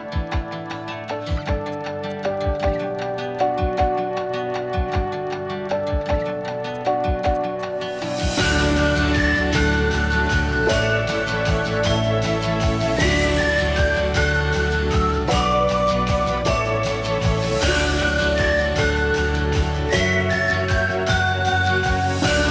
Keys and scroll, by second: 17.7 Delete.